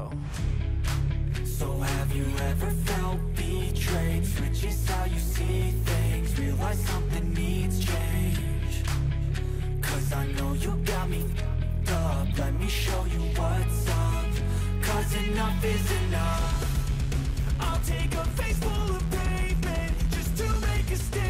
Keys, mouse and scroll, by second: 1.8 scroll up 1, 2.1 Right, 2.3 Right, 2.6 Right, 3.3 Up, 3.9 Right, 4.1 Up.